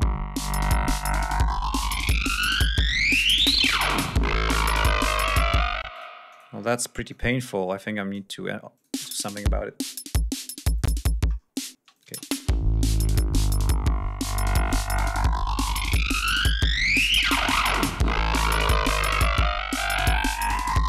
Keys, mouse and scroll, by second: 5.0 ctrl+scroll up 2, 5.6 ctrl+space, 5.6 ctrl+click, 6.0 ctrl+click, 6.8-8.0 drag, 8.4 click, 8.7 space, 10.5 click, 11.5 space, 11.6 click, 19.1 ctrl+scroll down 2, 19.4 ctrl+scroll up 2.